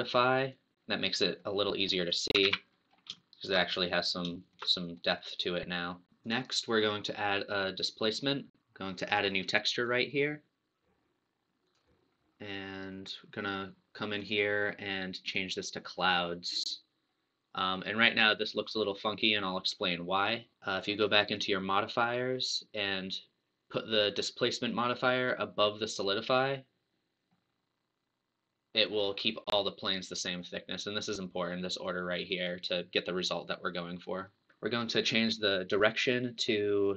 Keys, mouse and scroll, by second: 0.5 click, 1.4 middle click, 2.0 click, 2.6 alt+a, 2.8 scroll up 2, 3.2-6.1 shift+middle drag, 6.1 click, 7.9 click, 9.9 click, 11.8 click, 14.2-16.7 drag, 16.7-17.7 scroll down 1, 17.7-20.3 middle drag, 20.3 scroll up 2, 20.5 middle click, 21.3 click, 26.4 click, 27.3-29.0 middle drag, 29.0 scroll up 2, 32.3 scroll down 1, 35.9-36.9 drag.